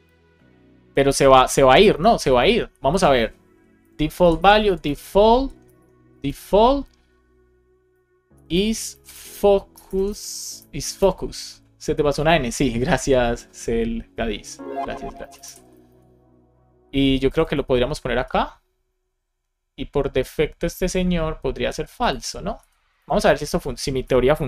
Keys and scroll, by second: 3.7 Return, 5.6 BackSpace, 8.3 shift+i, 8.8 shift+f, 9.6 BackSpace, 12.1 shift+super+Left, 13.1 Right, 15.1 Left, 15.8 super+c, 18.0 super+v, 22.9 Return, 23.2 super+v, 23.4 shift+l, 23.9 BackSpace.